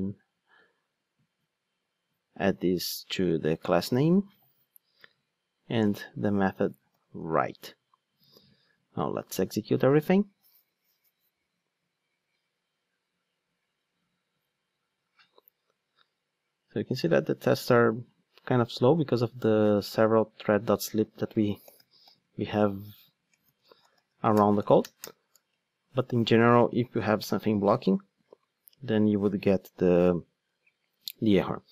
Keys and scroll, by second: 3.9 super+v, 21.1 super+f.